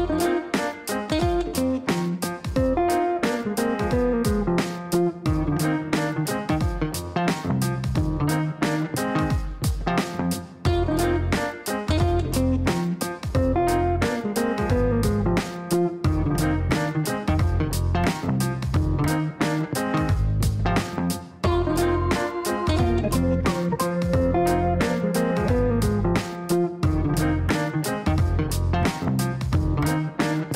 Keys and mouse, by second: 0.7 click, 1.1 click, 3.0 click, 4.1-5.0 typing, 5.0 Down, 6.9-7.9 typing, 9.4 KP_Divide, 9.7-12.8 typing, 10.1 KP_Add, 12.8 Down, 13.0 Down, 13.2 Down, 13.6 Up, 14.1 Return, 14.5 Return, 15.9 click, 18.1 click, 18.7 click, 21.8 click, 24.5-26.8 typing, 27.1 Return, 27.5 Return, 28.0 Return, 29.8 click.